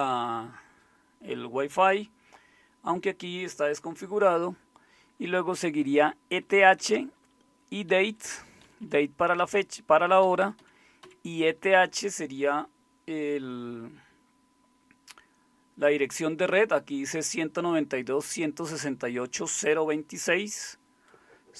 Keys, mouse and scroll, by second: 5.2 Right, 5.4 Right, 5.6 Right, 5.8 Right, 6.0 Right, 6.4 Right, 6.6 Right, 8.0 Right, 8.2 Right, 8.6 Left, 8.8 Left, 10.2-11.0 Left.